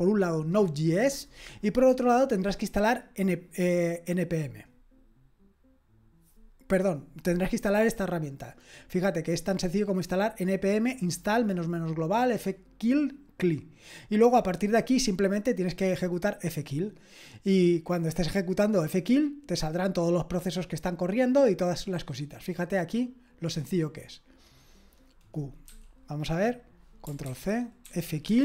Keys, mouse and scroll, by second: 16.4-17.4 scroll down 1, 17.4-22.3 scroll down 1, 22.3-24.4 scroll down 1, 24.4-25.6 scroll down 1, 25.6-26.9 scroll down 1, 26.9-27.2 scroll down 1, 27.2 ctrl+c, 27.6-28.4 typing.